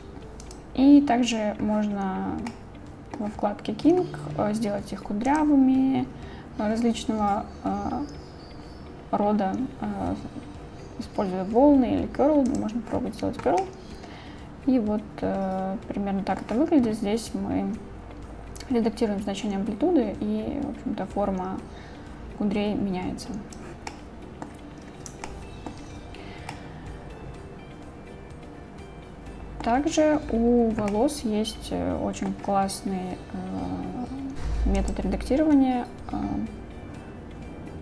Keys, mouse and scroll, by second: 0.5 click, 2.6-3.2 middle drag, 5.3-12.6 drag, 13.6-16.4 middle drag, 18.7-23.6 drag, 23.9 middle click, 25.3 shift+middle click, 26.5-29.7 middle drag, 30.9-32.3 middle drag, 34.8-37.8 drag.